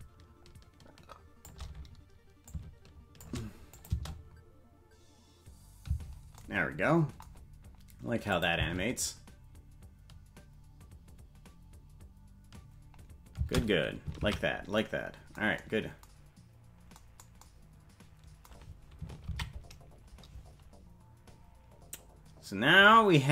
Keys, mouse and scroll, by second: 2.5 click, 3.7 click, 3.9 space, 6.4 space, 8.3 click, 8.6 space, 16.4 ctrl+space, 17.0 ctrl+s, 21.9 ctrl+s.